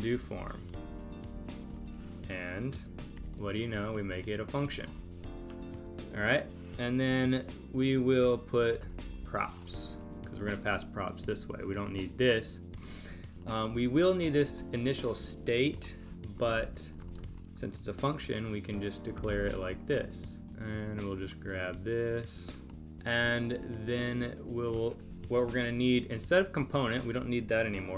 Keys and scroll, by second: 0.1 Left, 0.8 shift+super+Right, 2.7 space, 4.6 space, 5.1 Left, 9.8 super+Right, 15.4 Up, 17.2 space, 20.5 space.